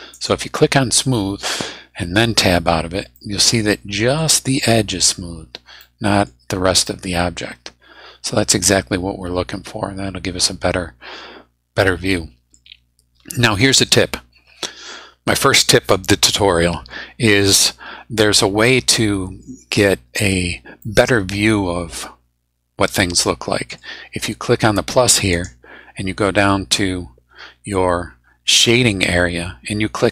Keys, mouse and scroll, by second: 0.1 click, 2.4 Tab, 3.2-4.4 drag, 5.8 click, 6.3-6.6 scroll down 2, 6.8-12.7 middle drag, 18.7 scroll up 2, 19.2 scroll down 2, 20.8-24.0 middle drag, 25.3 click, 26.0-27.1 scroll down 3.